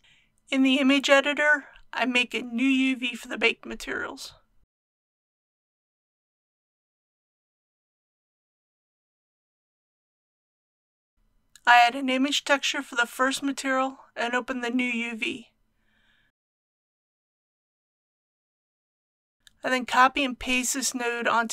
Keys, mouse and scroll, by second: 1.0 click.